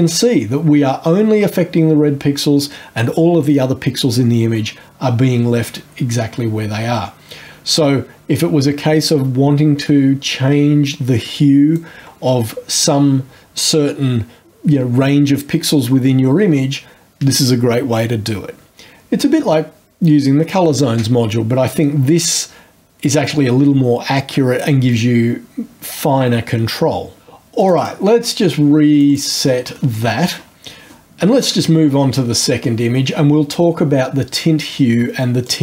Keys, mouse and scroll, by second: 7.1-12.0 drag, 27.6 click, 28.9 click, 35.4 click.